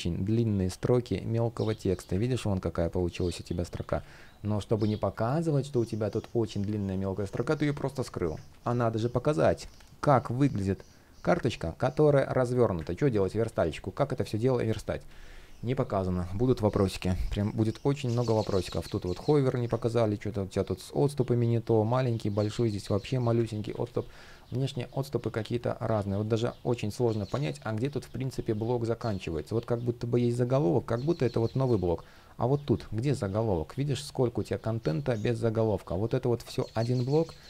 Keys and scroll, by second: 1.8 super+z, 3.6 super+z, 8.1 super+z, 12.6 super+z, 19.4 super+z, 23.3 super+z.